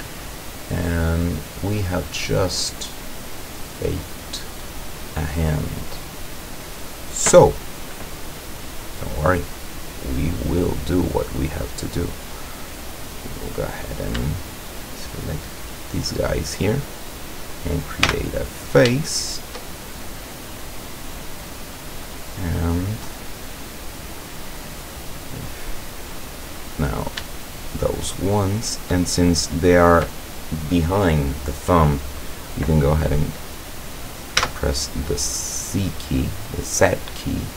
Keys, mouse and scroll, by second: 1.2-1.5 scroll down 1, 1.8-4.1 middle drag, 4.2-4.8 scroll up 1, 4.9 middle click, 5.8 middle click, 6.1 middle click, 7.2 middle click, 8.7 click, 9.2-10.1 middle drag, 10.7-11.2 middle drag, 11.5 middle click, 12.1 middle click, 13.4 right click, 14.4 shift+right click, 15.5 shift+right click, 16.3 shift+right click, 18.1 f, 19.0-20.2 shift+middle drag, 20.7 middle click, 21.1 scroll down 1, 22.2-23.3 middle drag, 24.4 scroll down 1, 24.9-25.5 middle drag, 25.7-26.6 scroll up 2, 26.6 right click, 27.5 shift+right click, 27.9-29.0 shift+middle drag, 34.4 z.